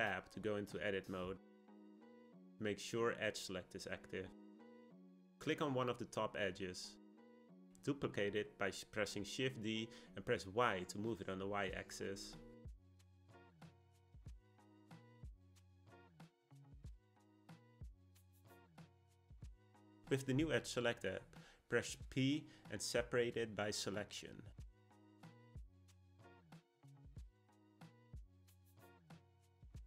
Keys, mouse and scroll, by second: 0.8 Tab, 1.8-4.8 middle drag, 5.3 click, 5.9-8.4 shift+middle drag, 8.4 shift+d, 17.3 click, 17.7 click, 21.2 p, 28.5 click, 29.1 Tab, 29.6 click.